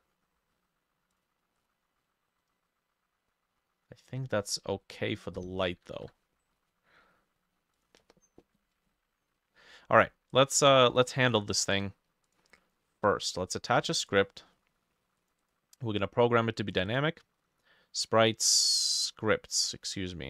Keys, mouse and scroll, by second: 1.6 double click, 4.9 middle click, 5.4 middle click, 6.0 ctrl+s, 11.6 right click, 15.5 double click, 16.9 double click.